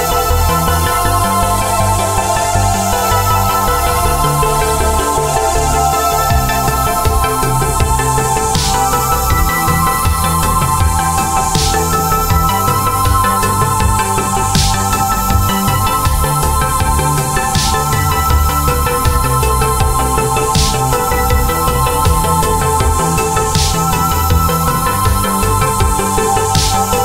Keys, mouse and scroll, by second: 1.4 click, 5.2 click, 5.8 alt+scroll up 1, 7.3 click, 11.7 click, 14.0 click, 15.0 click, 16.3 click, 20.0 typing, 20.9 click, 21.6 click, 22.3 click, 23.2 click, 26.4 click.